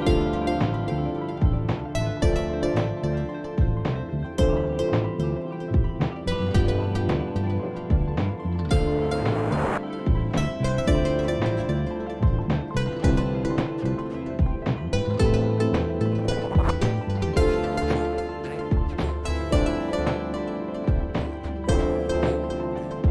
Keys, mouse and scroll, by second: 0.5 i, 2.9-3.7 typing, 4.0 click, 7.4 click, 9.3 click, 13.2 click, 15.9 click, 16.6 click, 17.0 scroll, 19.5 click, 21.5 click.